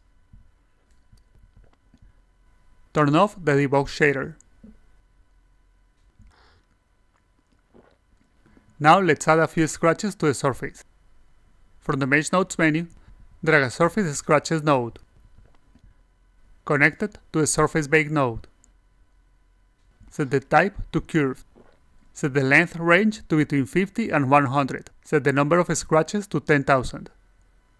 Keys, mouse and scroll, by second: 0.5 click, 2.0 click, 3.3 click, 3.6 click, 5.3-9.5 alt+drag, 9.7 click, 10.7 alt+click, 12.2 click, 14.2-15.6 drag, 15.9 alt+click, 16.3-16.7 drag, 16.9 alt+click, 17.8 click, 18.9 click, 19.4 click, 19.5 a, 20.6 click, 21.1 click, 22.0 click, 25.7 click.